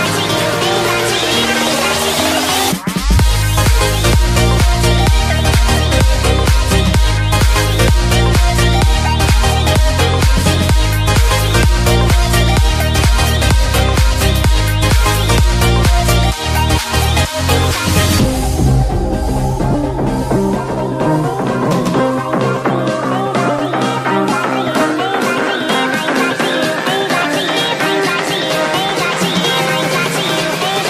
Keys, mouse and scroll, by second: 0.8 Return, 1.0 click, 1.5 alt+Tab, 2.0 click, 2.6 ctrl+c, 2.7 alt+Tab, 3.2 ctrl+v, 4.0 click, 4.3 ctrl+t, 4.6 click, 5.4 Return, 6.0 click, 6.0 Left, 6.4 Right, 6.7 click, 6.9 Left, 8.0 click, 8.9 Return, 9.0 Right, 9.9 click, 10.7 ctrl+t, 11.0 click, 11.4 Return, 11.5 click, 12.1 ctrl+t, 12.3 click, 12.7 alt+scroll up 2, 13.2 shift+click, 13.7 click, 14.4 Return, 14.6 ctrl+0, 15.4 click, 18.8 alt+scroll up 1, 19.5 alt+scroll down 1, 19.9 click, 20.9 alt+scroll down 1, 21.3 alt+Tab, 22.2 click, 22.6 BackSpace, 22.9 scroll down 1, 23.1 click, 25.9 Return, 26.1 Down, 27.4 Up, 28.2 click, 28.7 right click.